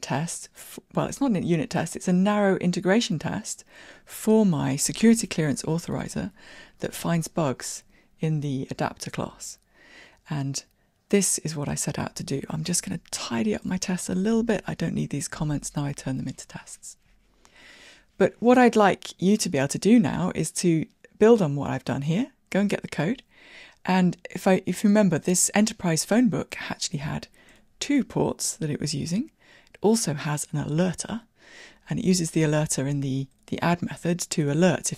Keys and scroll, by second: 0.0 shift+Escape, 14.5 super+x.